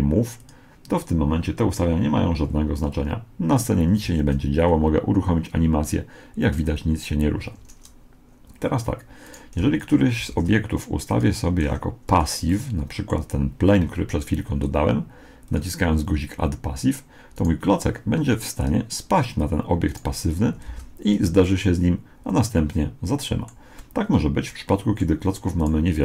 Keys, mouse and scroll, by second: 0.4-2.1 drag, 4.1 alt+a, 7.6 Escape, 9.3 right click, 9.6 x, 10.3 shift+a, 11.6 s, 12.5-14.3 middle drag, 15.5-17.3 drag, 17.4 right click, 18.6-20.3 drag, 19.9 right click, 20.7 alt+a, 21.5-23.4 middle drag, 23.8-25.5 middle drag, 25.6 right click.